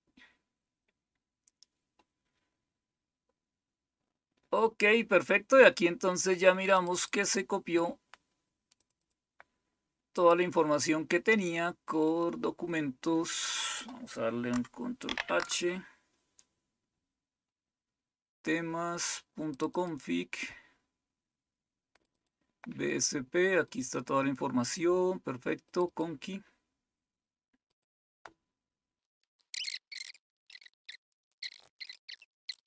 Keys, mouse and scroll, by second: 4.4-5.8 scroll down 2, 5.8-6.4 scroll down 1, 6.7 click, 8.7 click, 9.0 click, 10.1 click, 13.6 click, 15.0 ctrl+h, 19.5 click, 21.9 click, 22.1 click, 23.6 click, 25.6 click, 27.6 click, 29.1 click, 30.1 scroll up 2, 30.8 scroll down 2, 31.6 ctrl+h, 31.7 click, 31.8 click.